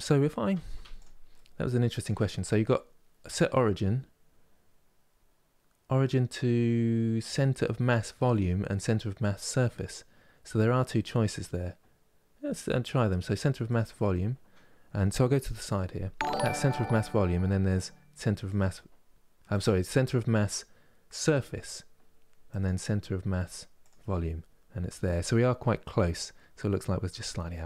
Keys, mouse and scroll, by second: 0.4 Tab, 0.7 click, 1.0 middle click, 1.6-4.6 right drag, 13.8-15.4 middle drag, 15.4 KP_3, 16.6-27.6 right drag.